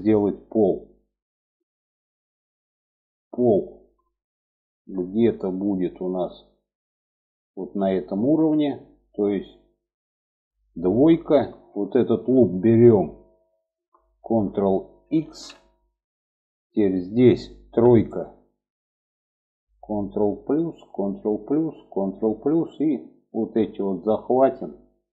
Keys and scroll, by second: 10.4 2, 14.5 ctrl+x, 17.0 3, 19.7 ctrl+KP_Add, 20.2 ctrl+KP_Add.